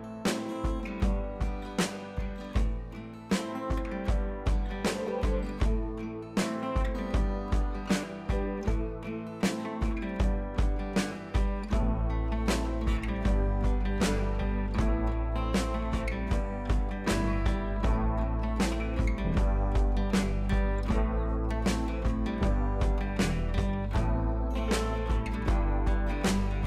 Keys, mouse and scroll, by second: 6.8 click, 9.2 ctrl+j, 10.2-10.9 scroll down 2, 10.9 click, 11.0-12.5 scroll down 2, 12.8 ctrl+z, 14.2 ctrl+j, 14.7 click, 18.7-19.0 click, 23.7 ctrl+z, 24.5-24.9 scroll up 1, 24.9 click, 25.1-25.6 scroll down 1, 25.8 ctrl+z.